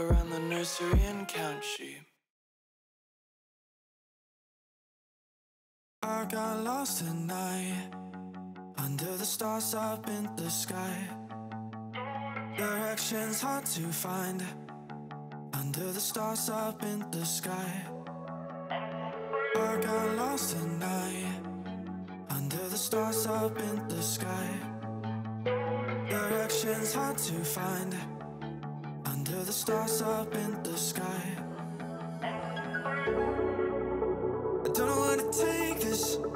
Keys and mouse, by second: 0.0 click, 0.7 z, 1.8 click, 3.6 click, 4.0 middle click, 5.0 middle click, 5.8 click, 11.0 KP_1, 14.6 shift+click, 14.8 Tab, 15.4 ctrl+r, 16.2 g, 17.6 ctrl+b, 21.2 z, 21.7 3, 22.6-24.1 drag, 24.6 middle click, 25.6 KP_1, 26.5 shift+middle click, 28.3 click, 28.7 click, 29.4 Tab, 30.2 click, 30.5 middle click, 30.8 g, 31.6 x, 31.7 x, 32.5 click, 32.5 x, 33.4 click, 34.3 click, 34.7 middle click, 35.2 click, 35.6 shift+a.